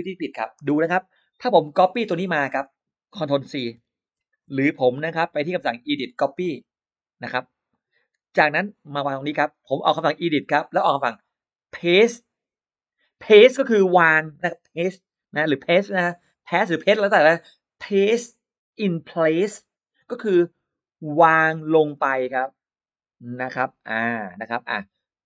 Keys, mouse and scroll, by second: 2.2 click, 4.1 ctrl+c, 4.4 click, 5.0 click, 6.2 click, 7.5 click, 9.0 click, 10.1 click.